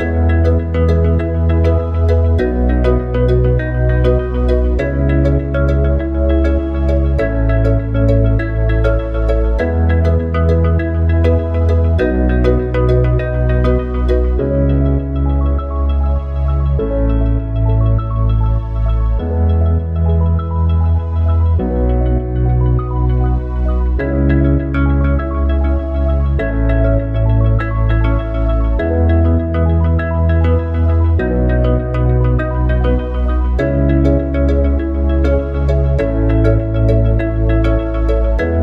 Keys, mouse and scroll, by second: 2.7 click, 7.3 click, 10.4 click, 15.6 KP_7, 18.7 Tab, 19.8 a, 20.9 u, 25.1 Tab, 27.2 click, 28.2-31.3 drag, 33.7 click.